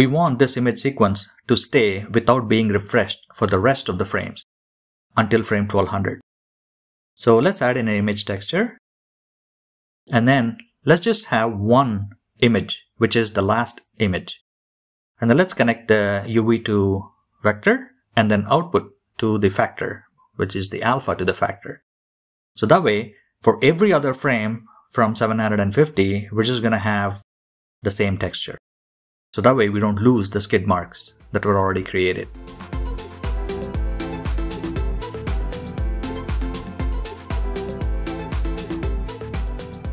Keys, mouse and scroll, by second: 0.5 middle click, 0.7-1.5 scroll down 3, 0.9 middle click, 3.2-9.4 middle drag, 9.4-12.4 drag, 15.7-17.7 middle drag, 18.3-19.1 scroll up 2, 27.9-39.9 middle drag.